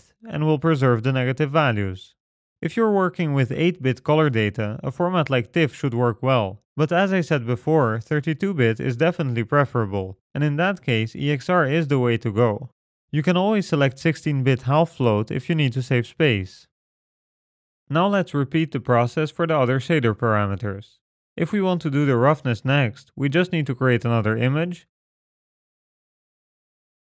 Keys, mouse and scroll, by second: 20.2-21.2 scroll down 5, 20.7 middle click, 21.2 middle click, 21.8 middle click, 22.1-23.1 scroll up 1, 24.8 click, 26.5 s.